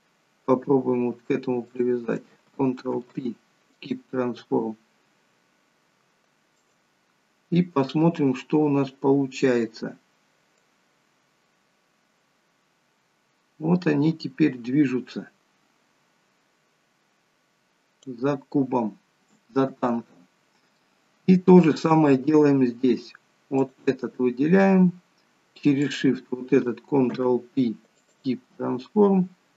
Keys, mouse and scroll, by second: 1.7 click, 4.7 scroll down 2, 6.6 click, 10.8 click, 19.9 ctrl+z, 20.9 middle click, 22.1-22.5 scroll up 4, 23.6 click, 24.2 scroll down 2, 25.8 shift+click, 27.2 ctrl+p.